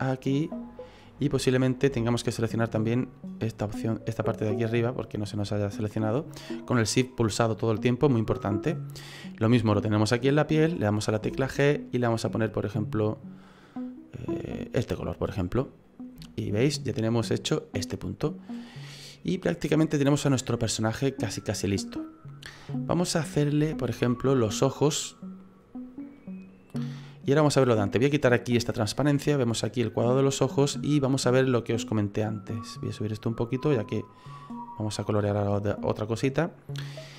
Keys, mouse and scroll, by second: 1.1 middle click, 3.1 shift+right click, 7.3 middle click, 11.3 g, 15.6 middle click, 15.8 right click, 16.2 shift+middle click, 16.6 middle click, 18.3-19.2 scroll down 4, 19.3 middle click, 23.7 shift+middle click, 24.6-25.5 scroll up 4, 25.5 right click, 26.2 middle click, 28.6 click, 32.6 click.